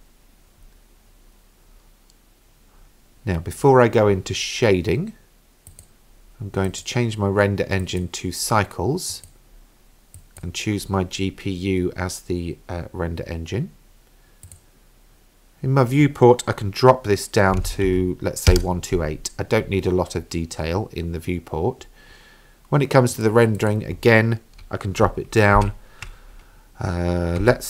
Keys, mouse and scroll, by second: 5.7 click, 6.7-8.1 drag, 9.1-10.4 drag, 14.5-19.3 drag, 23.1-27.6 drag.